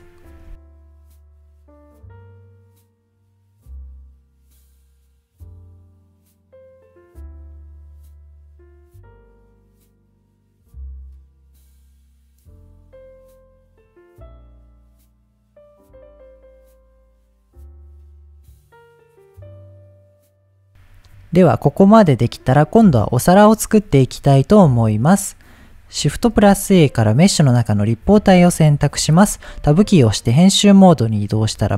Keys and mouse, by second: 1.1 shift+click, 2.2 click, 3.0 shift+click, 5.4 shift+click, 6.7 click, 7.7 middle click, 8.0 middle click, 8.2 click, 9.3-13.0 shift+drag, 13.3 middle click, 13.8 shift+click, 14.9 middle click, 15.2 middle click, 16.8 middle click, 17.1 middle click, 17.9 click, 18.1-19.2 shift+drag, 19.4 click, 19.6 middle click, 20.2 ctrl+s, 25.7 click, 26.2 shift+a, 28.6-29.0 middle drag, 29.5 Tab, 31.4 middle click.